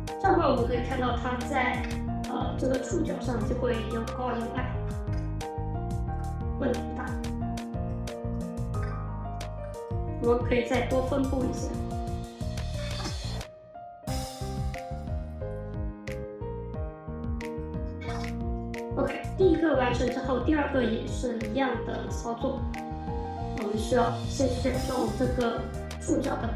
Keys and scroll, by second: 12.4-13.3 typing, 17.6-18.5 typing.